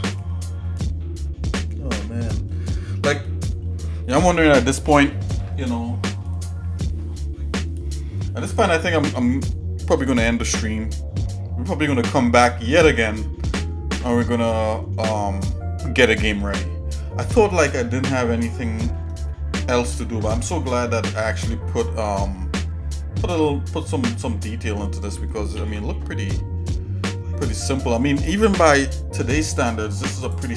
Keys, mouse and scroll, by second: 18.6-20.6 scroll down 1, 20.6 shift+middle click, 21.4 shift+middle click, 22.1 middle click, 25.7 ctrl+s.